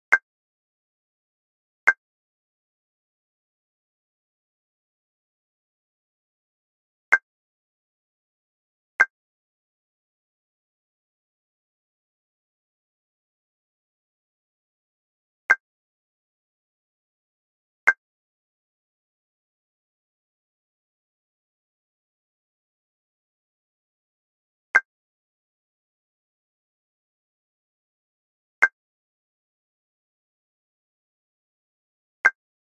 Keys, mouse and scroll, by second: 0.4 KP_3, 0.9 e, 4.2 Return, 7.3 ctrl+click, 8.7 e, 10.2 click, 12.4 Return, 12.4 e, 13.7 ctrl+s, 15.6 ctrl+click, 17.7 e, 18.8 click, 18.8 e, 20.7 Return, 21.9 s, 24.8 ctrl+click, 25.9 e, 28.7 g, 28.7 z, 32.3 click.